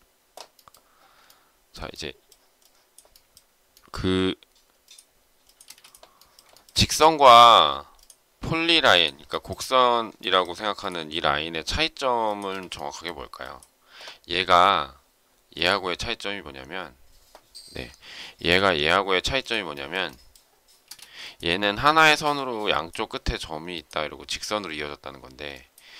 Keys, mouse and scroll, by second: 1.2 shift+middle click, 5.6 space, 6.5 shift+middle click, 6.6 shift+double middle click, 10.1 shift+middle click, 12.4 space, 17.8 m, 18.5 ctrl+click, 19.7 shift+middle click, 20.8 space, 21.2 shift+click, 22.0 shift+middle click.